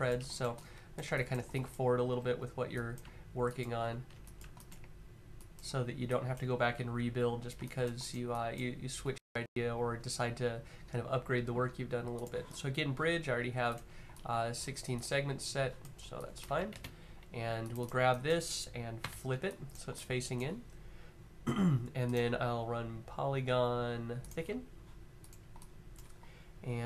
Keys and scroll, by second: 1.9 q, 16.2 q, 18.7 f.